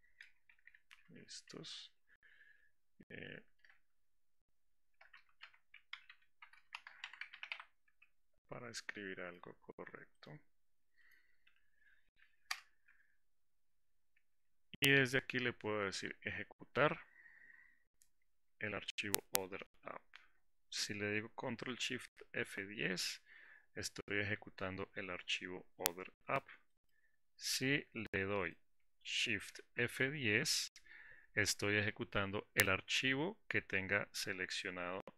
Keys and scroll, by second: 22.5 ctrl+shift+F10, 29.8 shift+F10.